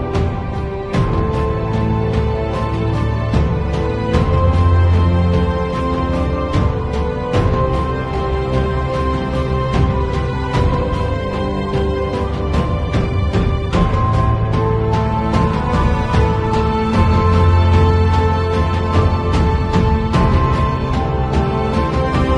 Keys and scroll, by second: 0.1 space, 0.8 space, 2.3 v, 3.5 shift+super+g, 16.4 Delete.